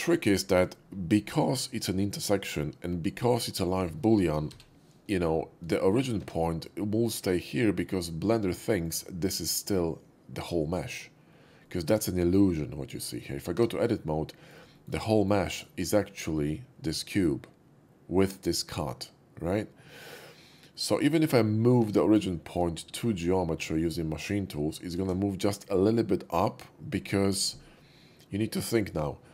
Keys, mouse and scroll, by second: 4.5 /, 5.7 shift+middle drag, 6.1 Tab, 7.5-8.8 middle drag, 11.5 middle click, 11.9 Tab, 12.9 Tab, 12.9 middle click, 14.1 middle click, 14.7 shift+middle click, 15.0 shift+middle click, 15.4 shift+middle click, 20.5 middle click, 21.8 Tab, 22.3 middle drag, 24.2 shift+s.